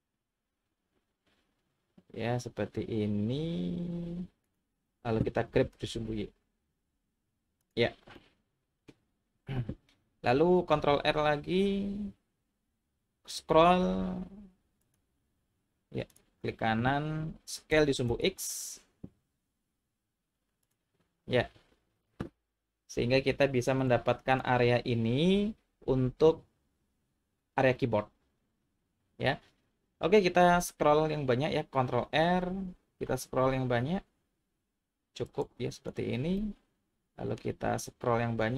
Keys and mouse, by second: 4.5 click, 5.5 g, 5.8 y, 7.6 click, 8.1 middle click, 10.7 ctrl+r, 17.7 s, 18.1 x, 20.6 click, 23.8 click, 32.2 ctrl+r, 35.7 click, 36.4-37.4 middle drag.